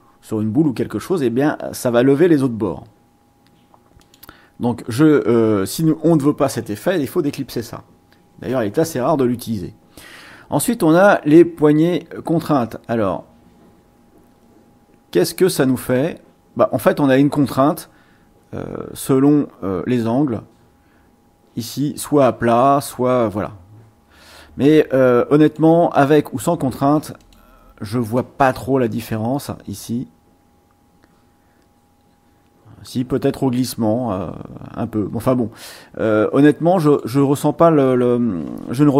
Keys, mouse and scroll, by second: 4.0 click, 7.3 ctrl+z, 10.8 click, 12.4-25.7 drag, 27.2 click, 29.4-37.2 drag.